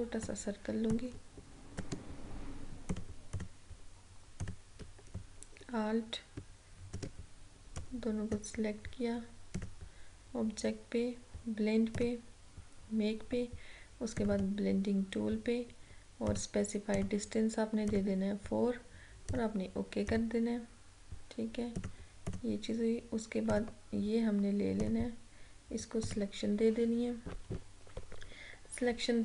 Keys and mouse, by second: 12.1 click.